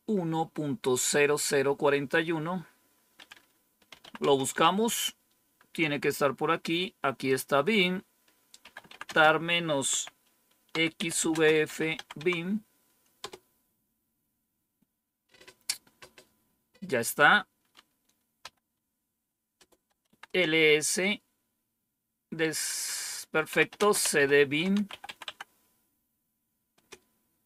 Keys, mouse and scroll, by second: 3.5-4.4 typing, 7.2 click, 8.3-13.1 typing, 18.3 typing, 19.5-20.4 typing, 23.1-25.4 typing, 26.6 typing.